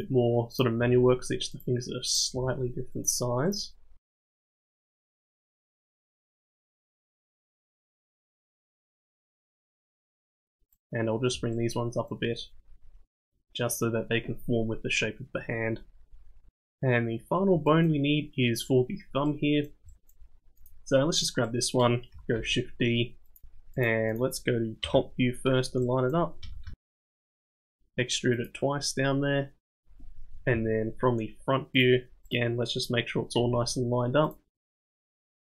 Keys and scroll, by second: 0.0-1.6 typing, 3.7 g, 4.4 g, 4.9 g, 6.3 g, 8.0 g, 11.4 g, 12.8 g, 14.1 g, 22.3 shift+d, 23.9 g, 24.4 KP_7, 25.0 g, 26.1 g, 26.5 g, 27.7 e, 28.4 e, 29.7-33.4 typing.